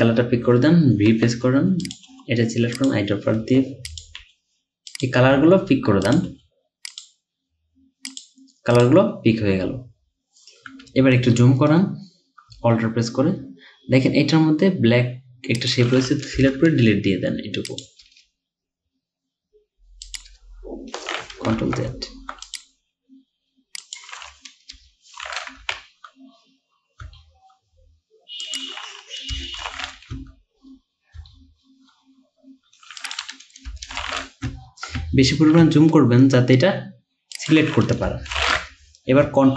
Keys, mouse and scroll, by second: 1.1-2.1 typing, 3.4-6.3 typing, 12.8-13.3 alt+scroll up 1, 16.4 BackSpace, 18.1 BackSpace, 20.3 BackSpace, 21.6 ctrl+z, 22.1-22.5 alt+scroll up 2, 22.5 alt+click, 24.8 BackSpace, 26.3-27.0 scroll down 1, 27.0 scroll down 1, 27.2-27.7 alt+scroll up 1, 29.4 BackSpace, 30.8-31.2 alt+scroll down 1, 31.3-32.0 alt+scroll up 1, 33.7 BackSpace, 35.1-35.9 ctrl+scroll down 4, 35.9-37.5 alt+scroll up 4, 38.1 BackSpace.